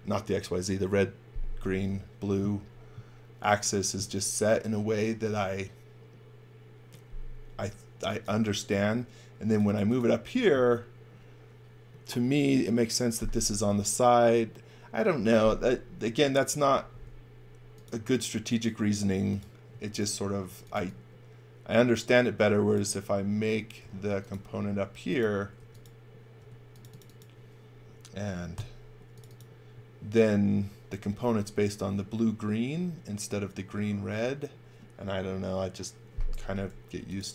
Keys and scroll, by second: 7.7-8.8 typing, 16.8 s, 19.6 space, 20.4 x, 20.7 v, 23.4 x, 23.7 c, 25.5 b, 26.3 space, 28.5 g.